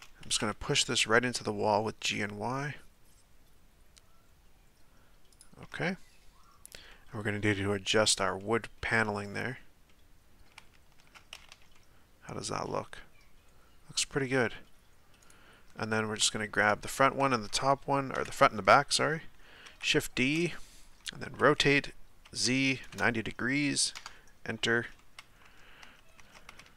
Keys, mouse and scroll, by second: 0.3 g, 5.9-9.2 middle drag, 9.2-9.9 scroll down 2, 9.9-10.6 middle drag, 10.6 Tab, 11.0 Tab, 11.3 a, 11.5 a, 11.7-14.7 middle drag, 15.2 right click, 16.2-16.9 middle drag, 16.9 shift+right click, 17.3-18.1 middle drag, 18.1 KP_7, 19.6 shift+d, 21.3 r, 25.0-25.8 middle drag, 25.8 Tab, 26.2 Tab, 26.5 a, 26.6 a.